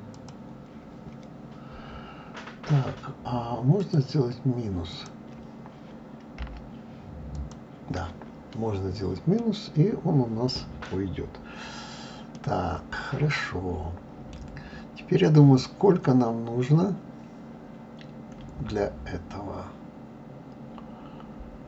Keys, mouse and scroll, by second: 3.8-6.8 drag, 9.4-15.3 middle drag.